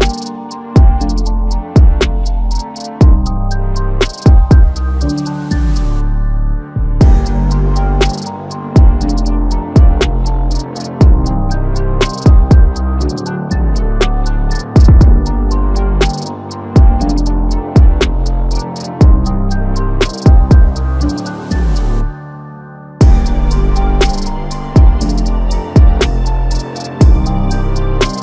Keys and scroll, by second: 8.2 ctrl+alt+t, 19.0 ctrl+t, 22.3-22.9 typing, 25.9 alt+Tab.